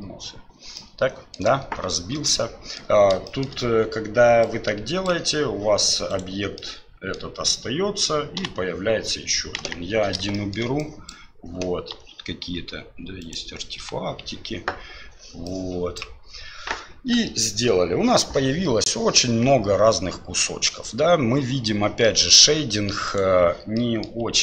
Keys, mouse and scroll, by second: 0.8-1.4 middle drag, 2.3 middle click, 3.3 shift+middle click, 4.5 click, 6.1 right click, 6.6-7.2 middle drag, 8.4 Delete, 9.6 KP_1, 10.3 shift+middle drag, 10.8-11.1 drag, 11.9 Delete, 13.2 right click, 13.8 Delete, 15.6-16.0 drag, 22.0 middle click, 23.1 right click, 23.7 middle drag.